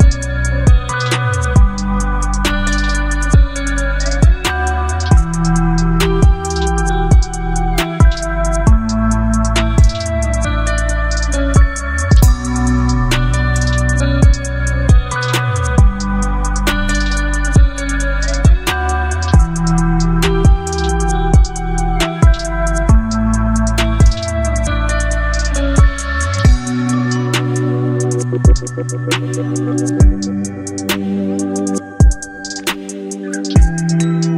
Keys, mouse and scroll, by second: 8.2-8.8 typing, 9.9-10.6 typing, 12.2-14.2 typing, 14.7 Return, 18.3 click, 21.3-26.7 drag, 26.7 e, 28.1 b, 30.3 d, 32.1-33.8 typing.